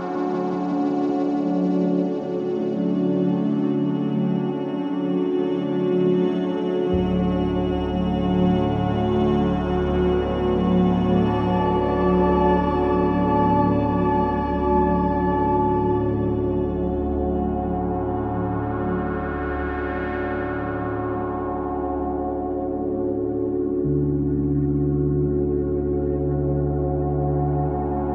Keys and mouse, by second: 1.0 alt+click, 2.1-3.3 alt+drag, 2.7-3.3 typing, 4.5 alt+shift+click, 4.6-5.4 typing, 8.1 click, 9.2 click, 9.5 click, 13.2 click, 15.3 click, 16.5 click, 17.6-19.9 alt+drag, 20.2-22.6 alt+shift+drag, 22.9-24.4 drag, 24.8 click, 25.7 click, 26.3-28.1 alt+drag.